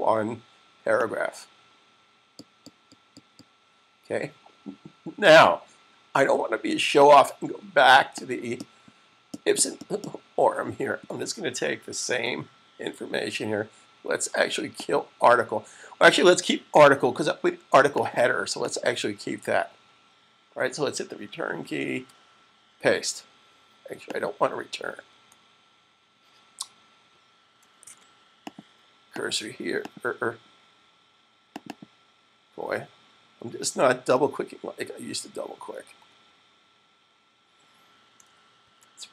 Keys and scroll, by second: 11.9 super+c, 22.0 v, 27.9 super+z, 33.0 Left, 38.5 super+z.